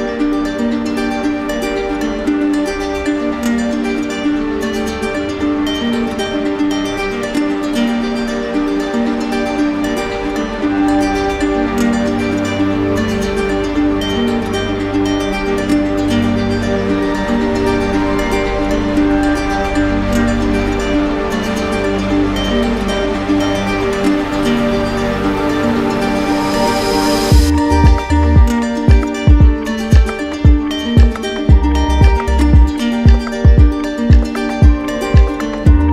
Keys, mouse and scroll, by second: 0.2 ctrl+click, 1.8 alt+right click, 3.8 alt+right click, 7.6 ctrl+click, 11.9 ctrl+click, 13.0 alt+right click, 14.3 alt+right click, 15.9 alt+right click, 17.1 click, 17.3 ctrl+z, 19.2 click, 21.0 click, 25.4 ctrl+click, 26.0 ctrl+click, 29.8 ctrl+click, 31.4 ctrl+click, 31.6 ctrl+z, 35.2 ctrl+click.